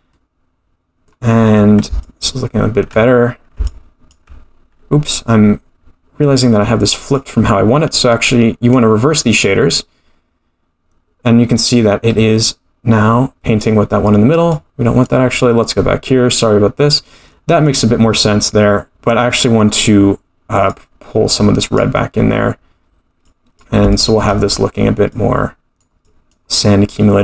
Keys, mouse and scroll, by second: 0.1 middle click, 2.0 ctrl+click, 3.6 ctrl+click, 7.1 click, 14.5 click, 17.3 middle click, 19.9 scroll up 1, 20.7 click, 22.7 scroll down 1, 23.2 click, 23.9 shift+middle click, 25.1 click, 26.1 click.